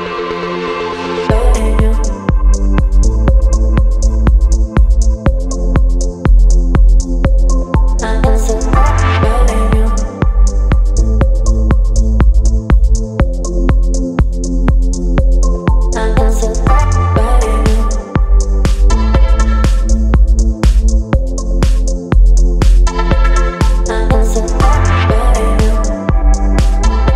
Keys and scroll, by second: 2.0 Return, 2.1 Delete, 2.4 ctrl+d, 2.5 ctrl+v, 4.0 space, 4.5 v, 8.6 ctrl+g, 11.9 Return, 14.1 space, 15.4 KP_3, 19.9 v, 23.6 ctrl+t, 26.9 ctrl+z.